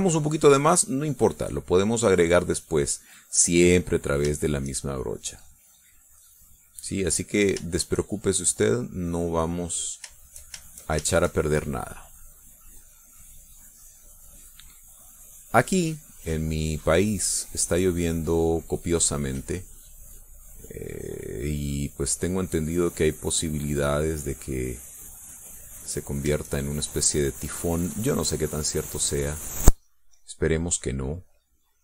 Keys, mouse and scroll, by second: 1.0-3.6 drag, 3.9 click, 4.9 shift+click, 5.7-8.2 drag, 8.3 shift+click, 9.0-10.4 drag, 10.6 shift+click, 11.2 shift+click, 11.6 shift+click, 12.4-18.6 drag, 19.6-27.2 drag, 27.5-31.8 drag.